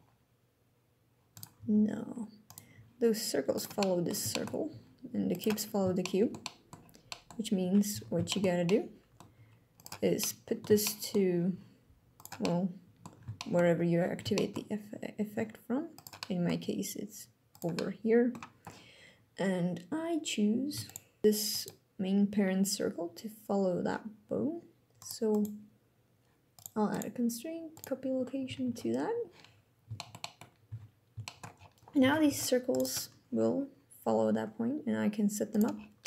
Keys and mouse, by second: 1.4 alt+g, 2.1 click, 2.4 g, 3.2 click, 3.6 click, 4.1 shift+drag, 4.4 g, 5.0 click, 5.8-6.4 shift+drag, 6.9 click, 7.6 z, 7.9 shift+middle drag, 8.4-8.9 middle drag, 9.0 g, 9.4 click, 9.9-10.3 middle drag, 10.6 shift+middle drag, 11.2 g, 11.8 click, 12.2-12.8 middle drag, 13.0 shift+middle drag, 14.0 shift+drag, 15.0 g, 15.6 click, 16.0 click, 16.3 g, 17.2 click, 17.4-18.2 middle drag, 20.5 shift+click, 21.2 ctrl+c, 24.9 click, 26.2 click, 26.6 click, 28.3 ctrl+v, 29.6 shift+click, 29.9 drag, 30.3 z, 30.9 shift+drag, 31.7 alt+a, 31.9 c, 32.4 click, 34.0 g, 35.2 click, 35.7 middle click.